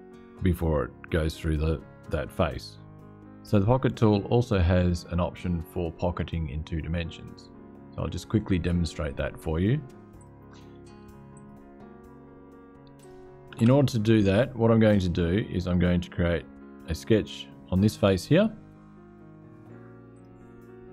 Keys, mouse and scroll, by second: 9.9 click, 11.1 click, 12.7 click, 13.3 space, 14.8-16.6 drag, 17.0 click, 19.8 click.